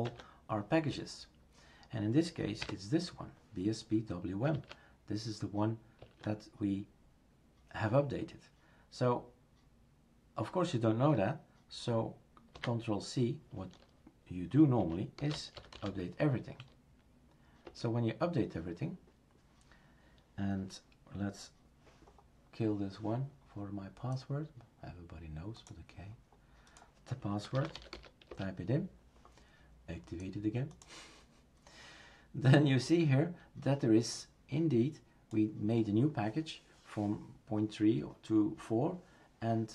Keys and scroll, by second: 0.0 Tab, 2.6 typing, 4.5 typing, 6.0 Tab, 12.5 ctrl+c, 14.5-16.3 typing, 17.6 Return.